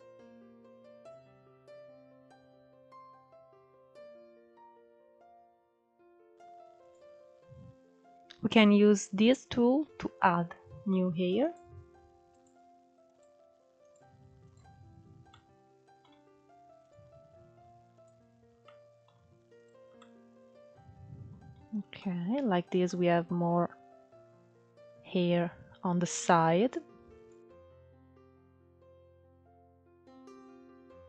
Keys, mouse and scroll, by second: 0.4 scroll down 4, 0.6 click, 0.7-1.7 middle drag, 1.9 KP_1, 2.1 alt+z, 2.3 alt+z, 2.4 scroll up 2, 2.6 middle click, 2.8 click, 2.9 middle click, 3.3 click, 4.0-5.5 shift+middle drag, 6.1-8.9 drag, 9.0 scroll up 1, 9.2-9.6 middle drag, 9.6-9.9 scroll up 2, 9.9 middle click, 10.5-14.2 drag, 14.2 scroll down 2, 14.4-15.9 middle drag, 15.9-17.7 drag, 17.7-18.6 middle drag, 18.6 click, 18.9-20.5 middle drag, 20.5-20.9 scroll down 4, 20.9-21.4 middle drag, 21.4-21.8 scroll up 3, 21.8-24.4 middle drag, 24.4-24.8 scroll down 3, 24.8-25.8 scroll up 4, 25.8-26.2 scroll up 1, 26.2 click, 27.0-27.6 scroll down 1, 27.6 click, 27.7 middle click, 28.1 click, 28.6 click, 29.0 middle click, 29.2 scroll up 1, 29.4-31.0 drag, 31.0 scroll down 1.